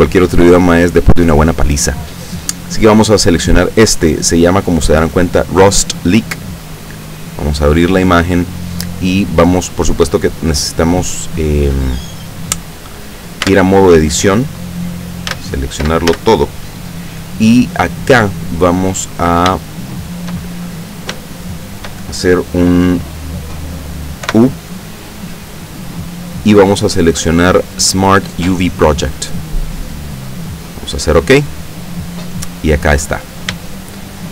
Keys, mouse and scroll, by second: 7.0 click, 8.2-8.5 scroll down 1, 13.5 Tab, 15.3 a, 16.1 a, 19.8 shift+middle click, 20.7-21.1 shift+scroll up 1, 21.3 shift+middle click, 24.3 u, 29.4 middle click, 30.0 click, 30.2 middle click, 31.4 click, 32.7-33.2 scroll up 1, 33.2 scroll up 1, 33.8 shift+click.